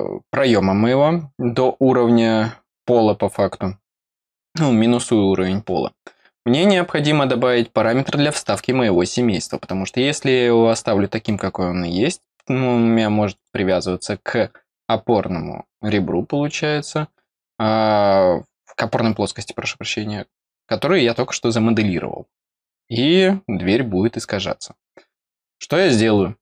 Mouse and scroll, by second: 9.4-9.8 scroll down 2, 10.6 middle click, 13.3 click.